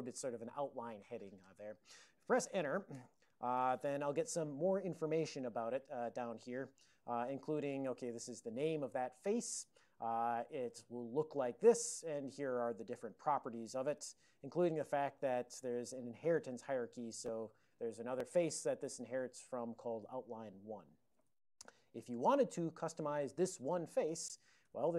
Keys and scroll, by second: 5.0 alt+o, 7.2 ctrl+x, 7.5 1, 8.3 alt+f, 8.4 alt+f, 9.0 alt+f, 11.4 ctrl+f, 11.6 ctrl+f, 11.7 ctrl+f, 12.1 ctrl+n, 12.6 ctrl+n, 12.7-15.4 ctrl+n, 15.4 ctrl+a, 15.7 ctrl+l, 17.1 ctrl+e, 21.4 alt+<, 24.8 Tab.